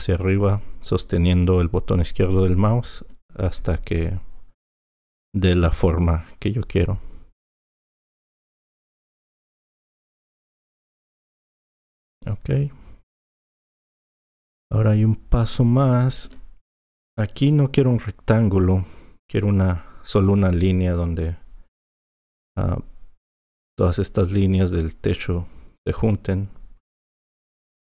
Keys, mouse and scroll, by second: 7.8 click, 12.6 click.